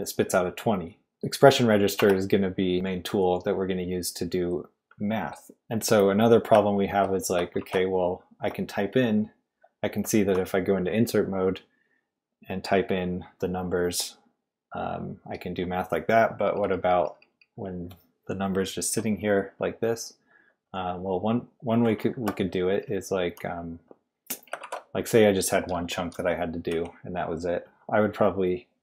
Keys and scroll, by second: 2.0 Escape, 2.7 d, 4.2 typing, 7.6 shift+v, 16.5-17.4 typing, 22.0-23.0 typing, 24.6 shift+v, 25.7-27.2 typing.